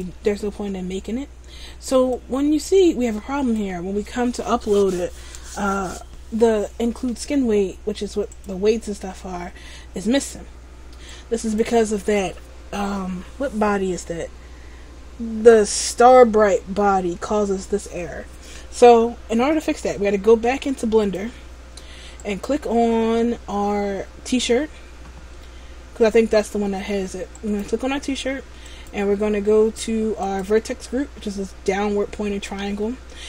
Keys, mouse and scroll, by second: 22.3 right click, 23.9-25.4 scroll up 3, 27.5 right click, 28.8 click, 30.3 click.